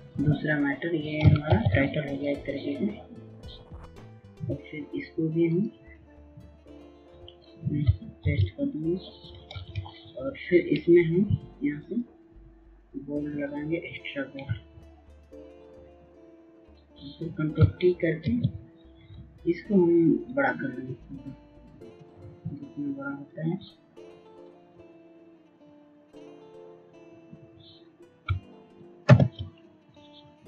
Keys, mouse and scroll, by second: 2.0 ctrl+c, 2.7 click, 8.8 ctrl+v, 10.1 ctrl+a, 12.4 click, 12.6 right click, 14.5 click, 14.6 right click, 17.2 click, 17.3 right click, 19.0 ctrl+t, 21.0-28.4 shift+drag, 28.6 click, 30.1 Return.